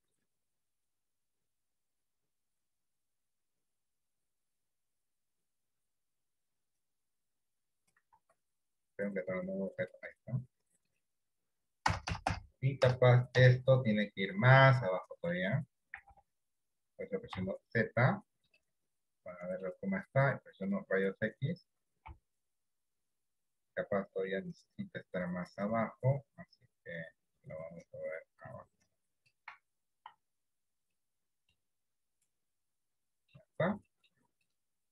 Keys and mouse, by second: 1.4 click, 2.0 click, 8.3 Tab, 9.9 click, 11.9-15.0 ctrl+KP_Add, 15.0 middle click, 16.2 KP_1, 17.4 KP_1, 17.4 z, 19.2 middle click, 20.6 click, 22.4 KP_3, 25.4-29.3 drag, 29.6 Tab, 30.2 z, 31.7-33.4 middle drag, 34.0 shift+middle click.